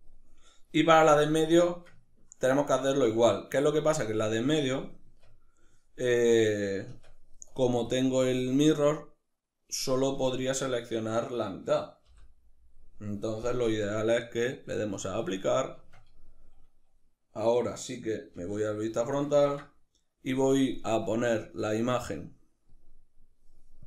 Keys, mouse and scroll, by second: 4.7 Tab, 7.5 click, 9.8 Tab, 10.9 right click, 11.7 l, 13.3 Tab, 14.6-18.7 drag, 15.4 Tab, 18.0 alt+q, 18.7-22.3 ctrl+shift+middle drag, 22.3 click.